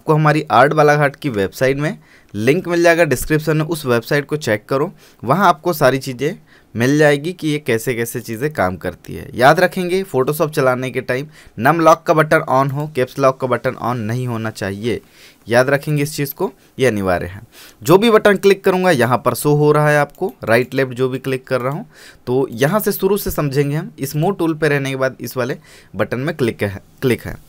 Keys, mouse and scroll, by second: 5.5 click, 8.4 click, 12.9 click, 18.2 click, 19.1 click, 20.3 right click, 20.6 click, 20.8 right click, 21.8 click.